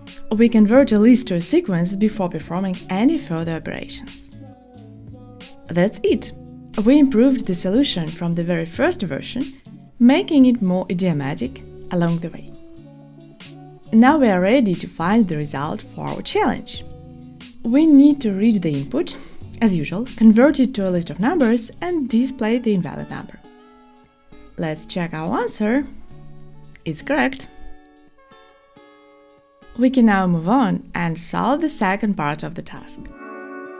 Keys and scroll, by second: 13.7 Tab, 16.3 F2, 18.4 Return, 20.0 shift+super+Return, 21.4 shift+super+Return, 21.6 Tab, 22.2 Return, 22.4 ctrl+shift+r.